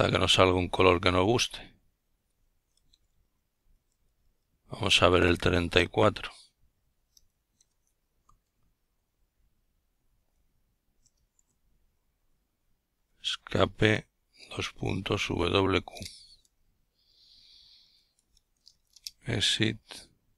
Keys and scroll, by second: 0.2 Delete, 0.5 4, 2.1 Escape, 3.4-5.0 typing, 5.1 Return, 6.7-8.1 typing, 11.4 ctrl+alt+t, 18.0 Up, 18.4 Up, 19.5 Return.